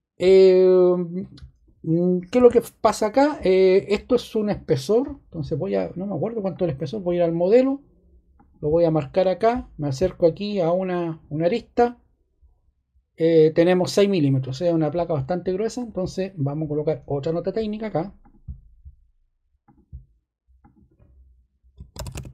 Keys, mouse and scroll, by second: 2.3 ⟲, 21.5-22.3 typing.